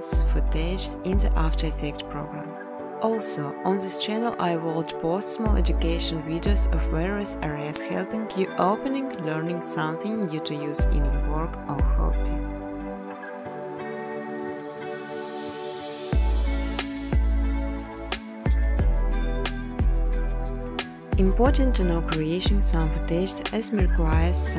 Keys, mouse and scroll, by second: 1.1 click, 1.9 click, 2.1 typing, 3.1 click, 4.0 click, 4.4 click, 6.0 click, 6.6-8.7 typing, 10.9 Tab, 11.2 Tab, 11.4 Tab, 13.4-14.8 typing, 15.1 Return, 17.2 click, 18.8 click, 20.9 click, 21.4-23.8 typing, 22.7 Tab.